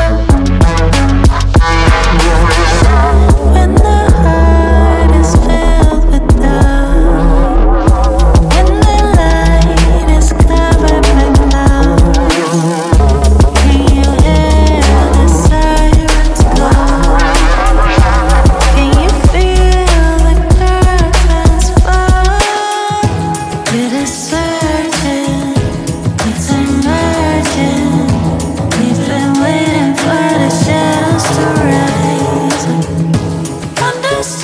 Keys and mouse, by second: 1.0-2.3 drag, 3.0-4.3 drag, 4.7-6.5 drag, 9.6 click, 10.4 ctrl+middle click, 11.3 click, 13.3 shift+z, 13.7 click, 14.1 click, 14.4 click, 14.8 middle click, 15.4 middle click, 16.1 ctrl+middle click, 16.5 Tab, 17.0 click, 17.7 middle click, 18.5 middle click, 19.5 click, 20.3 ctrl+middle click, 21.5 click, 22.0 click, 22.3 middle click, 22.8 ctrl+middle click, 24.0 ctrl+middle click, 24.6 middle click, 32.1 click, 32.8 click, 32.9 click.